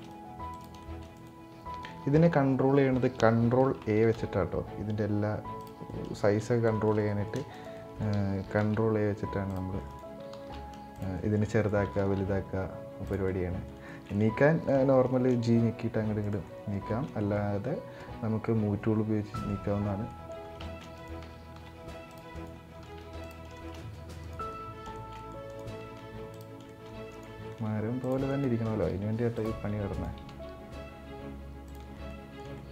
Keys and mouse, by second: 0.5 shift+middle click, 0.8 right click, 3.5 ctrl+a, 5.6 middle click, 6.6 middle click, 6.8 shift+middle click, 7.2 right drag, 7.5 middle drag, 8.2 ctrl+a, 9.6 right click, 10.2 ctrl+a, 10.8 middle click, 11.2 right click, 11.7 ctrl+a, 13.0 middle click, 13.6 shift+middle click, 14.6 g, 16.1 middle drag, 16.6 shift+middle drag, 19.0 middle click, 19.8 middle click, 20.3 shift+middle click, 20.7 right click, 21.2 ctrl+a, 22.0 right click, 22.7 ctrl+a, 23.2 shift+middle drag, 23.5 middle drag, 23.9 right click, 24.2-24.6 middle drag, 24.7-25.0 shift+middle drag, 25.2 right click, 25.5 ctrl+a, 26.4 shift+middle click, 26.8 right click, 27.4 ctrl+a, 28.0 right click, 28.4 ctrl+a, 29.6 right click, 30.1 ctrl+a, 31.8 middle click, 32.2 shift+middle click, 32.5 middle click.